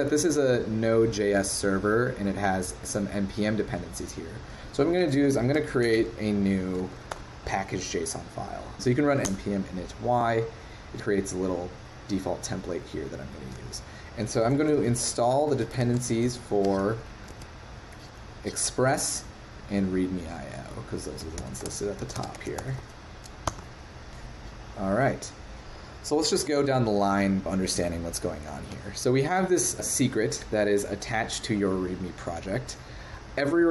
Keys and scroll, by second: 17.3 super+1.